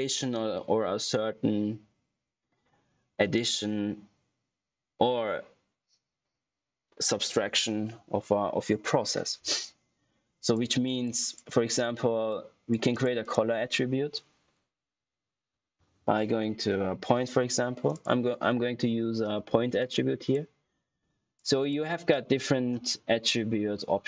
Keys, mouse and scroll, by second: 10.3 click, 13.1 right click, 15.2-16.6 typing, 17.0 Return, 17.8 click.